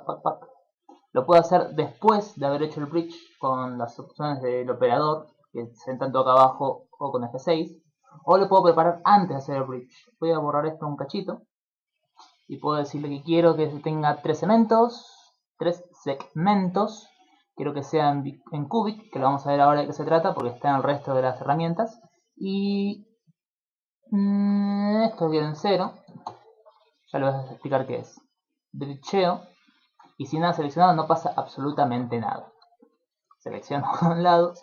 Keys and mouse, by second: 0.0 click, 1.1 click, 7.0 F6, 10.7 middle click, 11.1 x, 13.2 click, 13.8 click, 17.3 click, 24.8 click, 28.4 click, 31.4 middle click, 31.8 ctrl+Tab, 32.8 alt+right click, 33.8 alt+shift+right click.